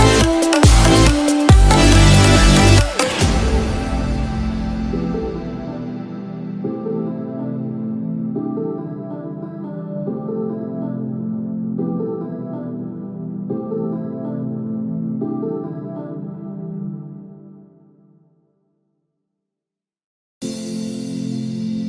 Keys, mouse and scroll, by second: 16.0 shift+middle click, 16.0 scroll up 1.